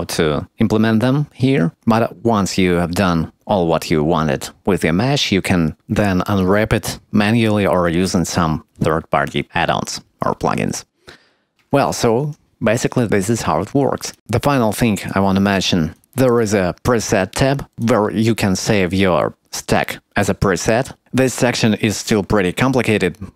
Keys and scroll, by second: 11.5 Tab.